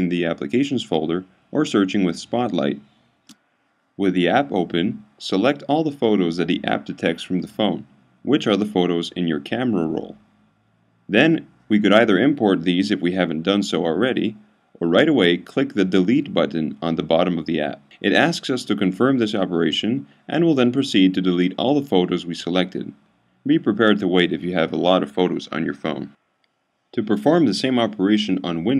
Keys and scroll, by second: 0.7-2.1 typing, 9.3 super+a.